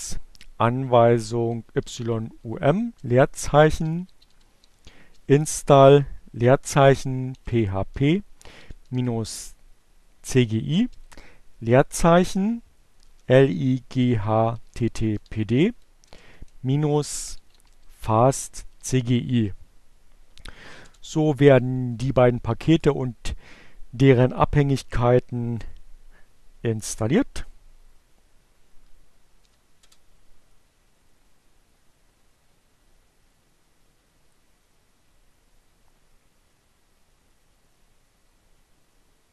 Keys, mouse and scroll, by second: 0.7 y, 1.3 u, 1.6 m, 3.2-4.7 typing, 5.9-9.0 typing, 11.0-11.9 typing, 13.3-18.1 typing, 18.8 Return, 29.5 j.